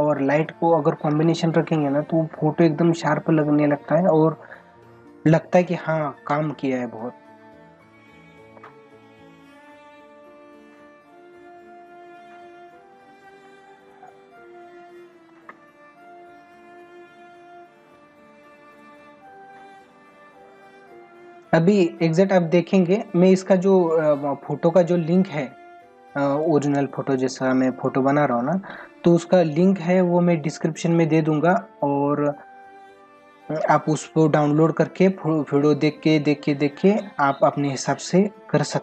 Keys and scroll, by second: 2.3 ctrl+=, 4.2 ctrl+=, 6.7 space, 10.6 ], 15.9 ], 18.5 ctrl+-, 20.2 ctrl+-, 26.8 ctrl+=, 28.5 space, 29.9 ctrl+=, 34.3 ctrl+-.